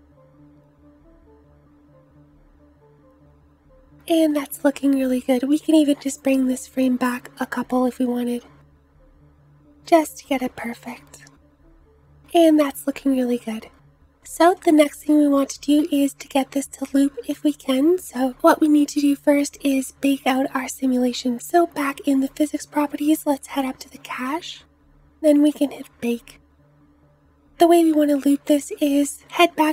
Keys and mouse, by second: 2.9 space, 3.3 space, 3.6 space, 7.7 space, 12.6 space.